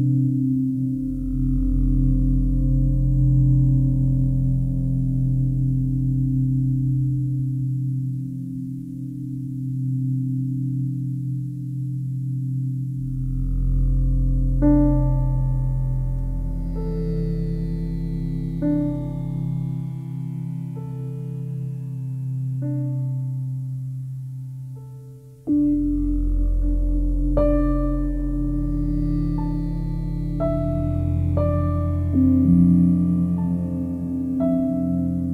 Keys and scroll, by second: 10.8 c.